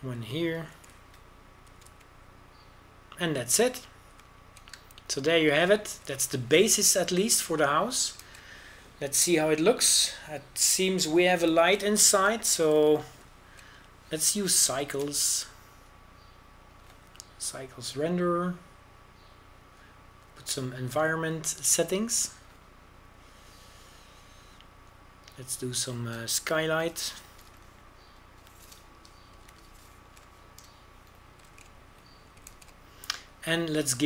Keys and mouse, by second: 1.4 z, 2.7 w, 3.7 a, 3.8 z, 5.4 middle click, 8.2 Tab, 10.3 shift+z, 14.9 z, 16.8 shift+space, 20.5-26.4 middle drag, 27.6-29.5 middle drag, 29.5 KP_0, 31.5 BackSpace, 33.5 shift+z.